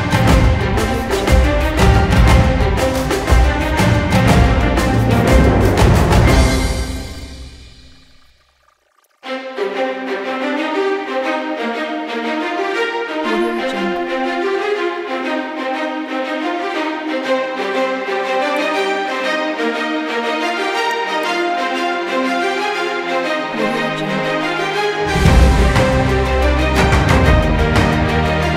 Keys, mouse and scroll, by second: 0.0-1.2 typing, 0.0-0.4 shift+click, 1.0 shift+click, 1.1 click, 2.2 shift+click, 3.0 shift+click, 3.3-7.0 typing, 4.3 shift+click, 5.3 shift+click, 5.6 click, 6.0 ctrl+click, 6.7 shift+click, 7.1 ctrl+click, 7.5 click, 7.9-8.3 shift+click, 8.3-11.2 typing, 8.6 shift+click, 9.0 shift+click, 9.4 shift+click, 10.0 click, 11.1 shift+click, 11.4 shift+click, 11.9 shift+click, 12.7 shift+space, 13.1 shift+click, 13.7 space, 14.1 shift+click, 14.3 space, 14.9 shift+click, 15.0 space, 15.3 shift+click, 15.5-16.0 shift+click, 16.2-16.7 click, 17.2 space, 17.3 click, 18.1 ctrl+space, 18.2 ctrl+click, 18.3 ctrl+space, 18.8 alt+right click, 18.9 click, 19.2 alt+right click, 19.6 click, 20.0-22.8 typing, 20.4 click, 21.6 shift+click, 22.0 shift+click, 22.1 click, 22.3 shift+click, 23.8 click, 24.1 shift+click, 24.4-24.7 click, 25.0 space, 25.3 click, 25.7 space, 26.1 click, 26.7 click, 27.1 shift+click, 27.1 space, 27.2 click, 27.4 space, 28.2 shift+space, 28.5 shift+space.